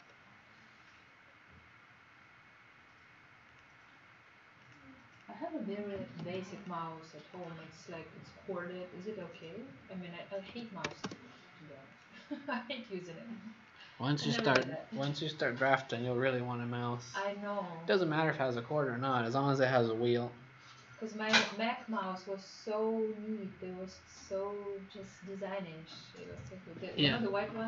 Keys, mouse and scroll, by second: 6.0 m, 6.5 click, 8.0-8.4 scroll down 2, 9.2 click, 10.1-11.3 typing, 11.9 click, 14.1 Escape, 14.3 Escape.